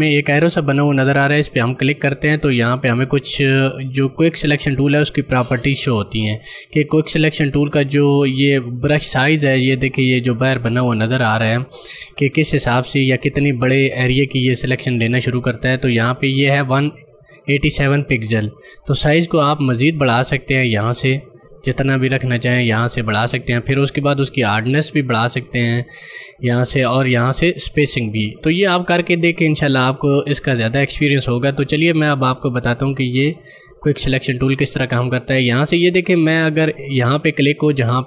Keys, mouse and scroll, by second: 1.9 click, 19.1 click, 20.3 click, 34.2 click.